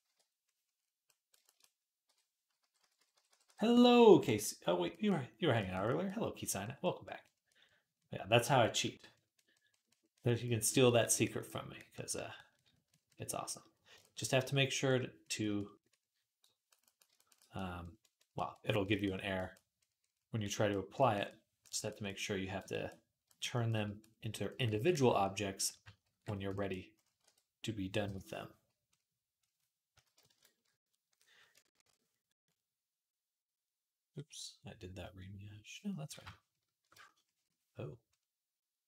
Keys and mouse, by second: 1.9-3.3 typing, 25.9 ctrl+r, 27.0 r, 30.1 KP_0, 33.7 ctrl+r.